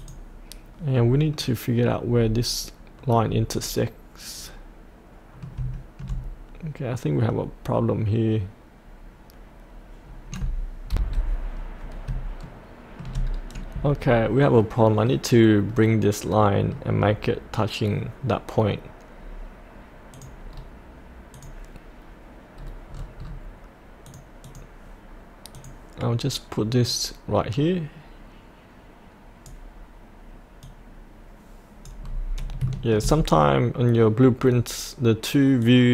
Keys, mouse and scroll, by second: 1.3 middle click, 2.2-3.2 scroll down 1, 3.8-5.6 middle drag, 5.7-10.9 shift+middle drag, 10.9 F8, 11.5 scroll down 1, 12.4 shift+middle click, 13.2-13.9 scroll down 1, 14.6-17.3 middle drag, 20.1 click, 20.5-21.3 scroll down 1, 21.3 click, 22.6-23.0 scroll down 1, 24.1-32.0 drag, 32.0-32.6 scroll up 1, 35.6-35.9 drag.